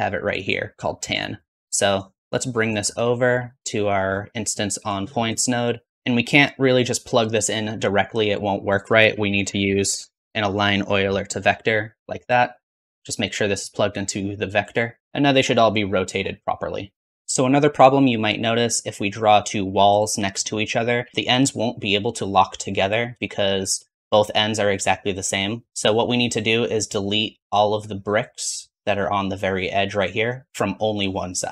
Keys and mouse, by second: 8.9 shift+a, 11.9 click, 12.2 middle click, 12.9-17.1 drag, 17.1 ctrl+z, 23.2 shift+middle click.